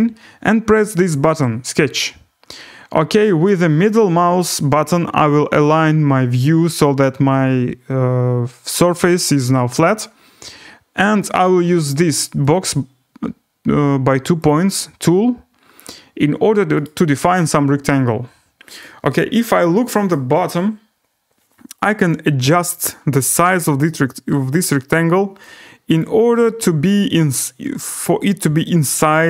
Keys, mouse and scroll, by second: 1.7 click, 3.4 right click, 5.1 middle click, 6.2-6.6 scroll down 4, 6.6 scroll up 4, 6.9-7.3 scroll down 2, 7.3-8.3 scroll, 11.7 middle click, 12.6 click, 15.4 click, 15.8 click, 16.8 right click, 20.1 right click, 20.5 middle click, 21.0 scroll, 22.1 click, 23.2 click, 23.2-24.4 scroll, 24.6 click, 25.6 scroll down 4, 26.0 click, 26.0 scroll, 27.9 click, 29.1 click.